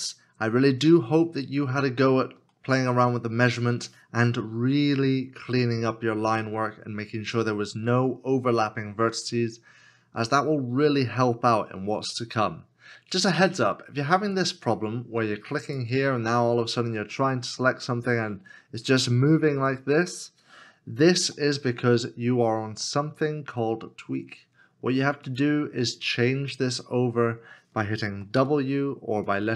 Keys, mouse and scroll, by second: 2.3 x, 2.5 shift+middle click, 21.2 ctrl+z, 28.7 w.